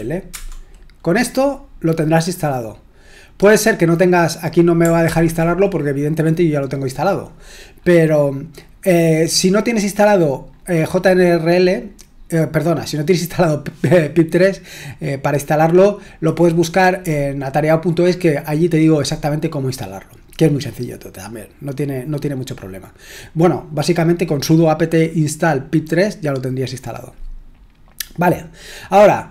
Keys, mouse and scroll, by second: 0.3 Return, 5.1 ctrl+l, 8.7-10.2 scroll down 2, 10.2-15.7 scroll up 3, 15.7-19.3 scroll up 1, 19.3-24.1 scroll up 1, 24.1-26.3 scroll up 1, 26.3-27.9 scroll up 1, 27.9-29.3 scroll up 1.